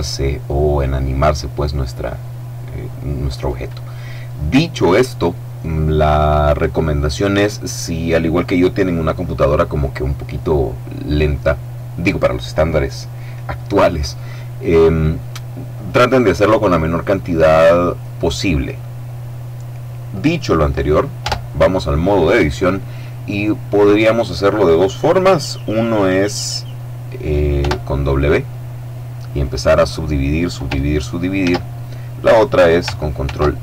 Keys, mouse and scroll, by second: 21.1 Tab, 27.5 w, 29.2 click, 31.3 ctrl+z, 33.1 ctrl+r.